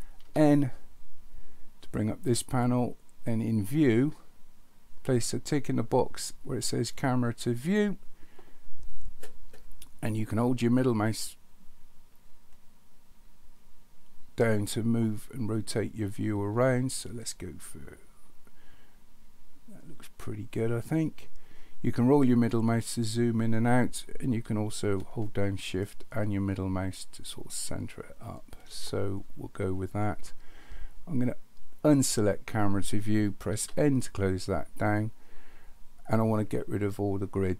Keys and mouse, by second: 0.2 n, 3.5 click, 7.6 click, 10.5-21.1 middle drag, 25.8-28.7 shift+middle drag, 31.9 click, 33.6 n.